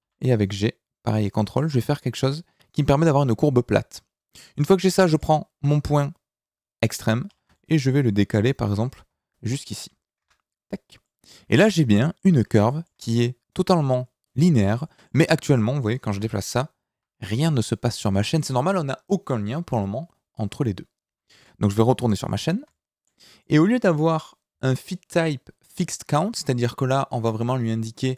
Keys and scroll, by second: 0.0 g, 8.6 g, 10.2 Tab, 15.3 Tab, 16.1 g, 16.9 Escape, 18.2 Tab.